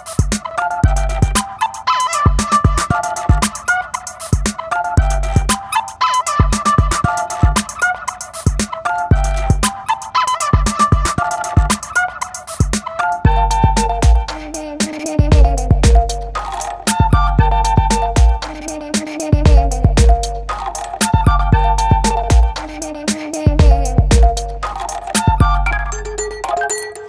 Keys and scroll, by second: 0.8 Return, 7.4 shift+super+g, 9.7 m, 15.9 shift+super+n, 16.2 shift+super+Return, 16.7 alt+shift+super+Return, 16.8 alt+Delete, 17.1 alt+super+d, 17.3 super+v, 18.2 v, 22.4 shift+super+e.